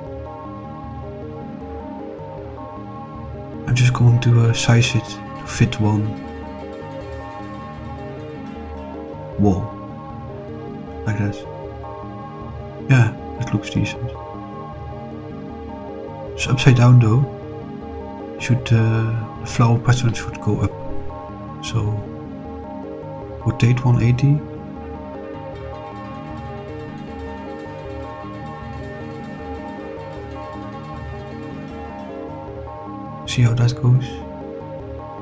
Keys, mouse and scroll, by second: 3.1 s, 3.7 ., 3.8 3, 4.7 Return, 6.4 s, 10.1 click, 12.6 click, 13.4-13.8 middle drag, 14.0 scroll down 2, 14.7 scroll down 2, 15.2-17.8 middle drag, 21.5 click, 23.5 r, 24.3 8, 24.5 0, 26.4 0, 27.0 BackSpace, 27.2 BackSpace, 27.3 BackSpace, 28.5 1, 28.7 8, 28.8 0, 29.6 Return, 34.5 click.